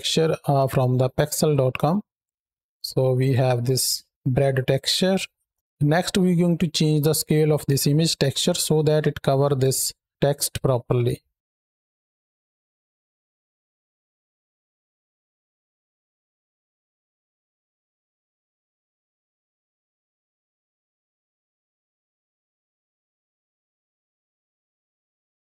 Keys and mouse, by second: 2.7-3.3 shift+drag, 4.5 click, 11.4 ctrl+space, 12.4 shift+click, 12.8 shift+click, 14.2 shift+click, 15.4 click, 16.2-17.6 shift+drag, 17.8 shift+click, 18.9 click, 19.7-21.6 shift+drag, 22.4-23.5 shift+drag, 23.7-25.4 middle drag.